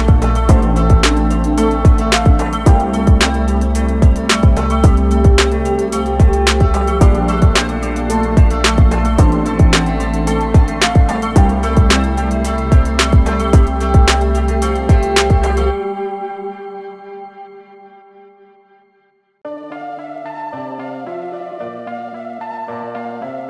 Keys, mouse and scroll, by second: 2.1 a, 2.5 click, 3.9 i, 5.8-7.0 typing, 7.0 click, 12.0 click, 13.4 typing, 13.9 click, 14.6 a, 15.2 click.